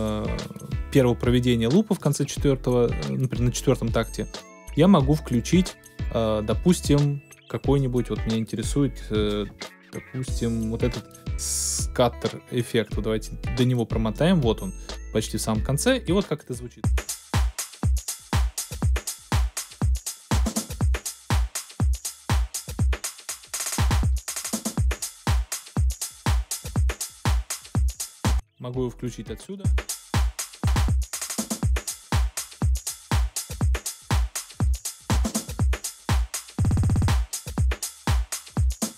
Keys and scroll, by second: 16.8 space, 28.3 space.